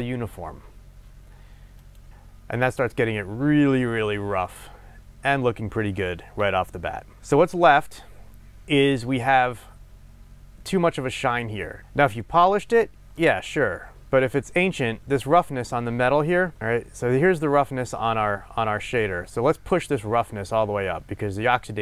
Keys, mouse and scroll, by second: 2.0 click, 13.2-21.8 middle drag, 14.1-14.7 scroll down 2, 14.7 scroll down 1, 16.3 scroll down 2.